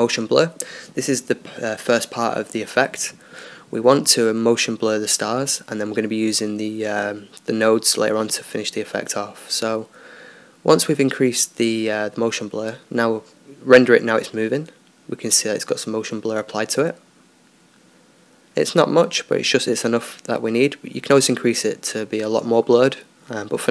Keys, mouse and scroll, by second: 2.7-11.6 drag, 11.6 Escape, 12.4-13.9 drag, 15.3 click.